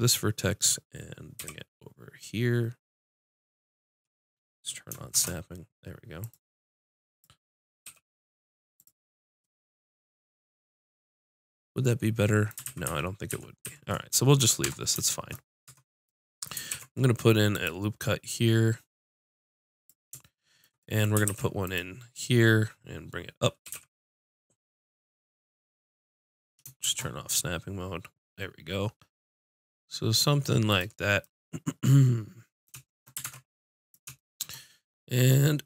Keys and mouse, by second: 1.4 g, 6.3-9.2 drag, 7.8 g, 12.7 ctrl+z, 12.9 ctrl+z, 13.3 ctrl+z, 13.7 ctrl+z, 14.6 Tab, 15.7 Tab, 16.7 ctrl+r, 19.9-24.4 drag, 21.3 ctrl+r, 30.8-32.5 drag, 33.2 ctrl+Tab.